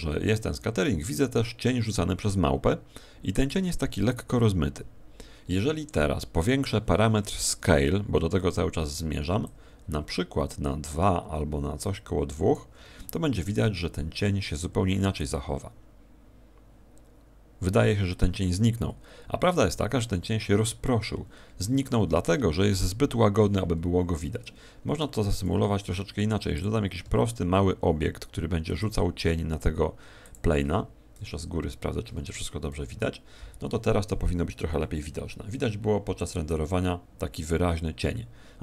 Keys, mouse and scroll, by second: 24.1 Escape, 25.2 shift+a, 27.0 s, 28.8 click, 30.2 click, 30.2 g, 31.1 KP_7.